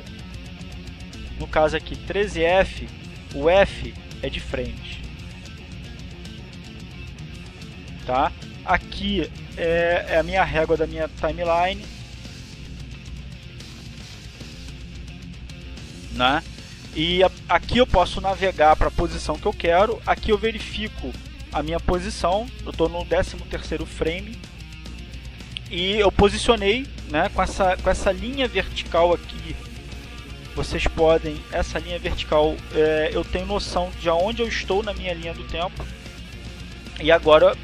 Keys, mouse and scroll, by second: 1.6 click, 2.7 click, 4.1-5.9 drag, 6.5 click, 7.6-10.9 drag, 11.0 click, 13.2 click, 13.8 click, 14.6-17.0 drag, 17.3-19.1 drag, 32.4 click, 32.9 click, 34.3-35.4 drag.